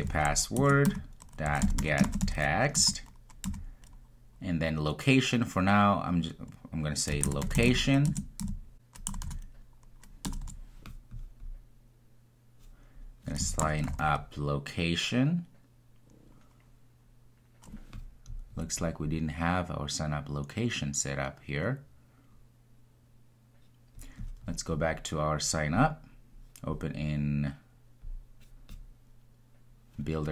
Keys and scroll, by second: 8.1 Return.